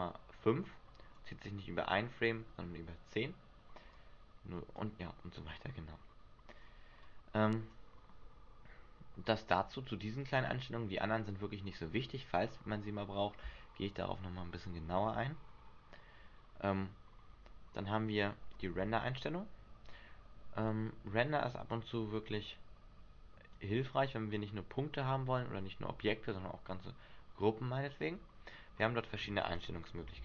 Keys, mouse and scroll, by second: 4.1 click, 7.2 click, 15.7-17.5 scroll down 4, 20.8 click, 21.9 click, 28.9-29.5 scroll down 5, 29.8 scroll down 1.